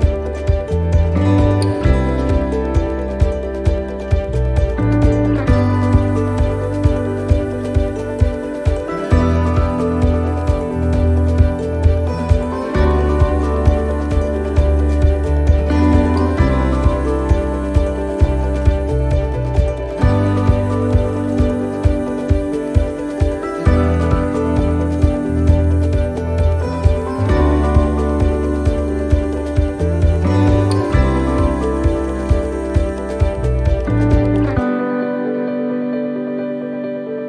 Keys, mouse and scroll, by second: 1.0 click, 3.7 u, 5.5 scroll up 1, 5.9 shift+middle click, 6.4 scroll up 1, 6.8 shift+middle click, 9.7 right click, 10.9 l, 12.7 l, 20.7 middle click, 21.0-21.4 scroll down 1, 23.4 click, 34.2-37.2 click.